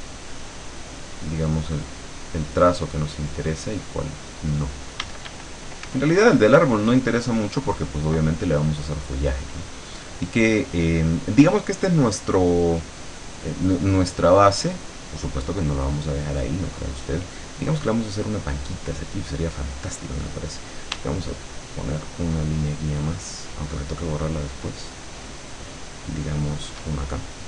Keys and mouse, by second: 2.8-4.7 drag, 5.1 d, 5.9 f, 7.6 click, 7.9 click, 14.0 click, 15.6 click, 21.7-27.0 shift+drag.